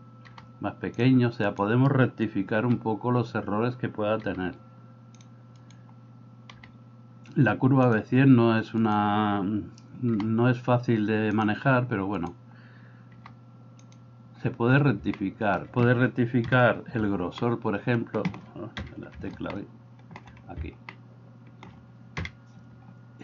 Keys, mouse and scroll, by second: 0.2 g, 2.6 g, 6.7 g, 10.2 g, 15.2 middle click, 16.5 KP_7, 17.4 middle click, 19.6 shift+middle click, 21.0 middle click, 22.3 KP_7.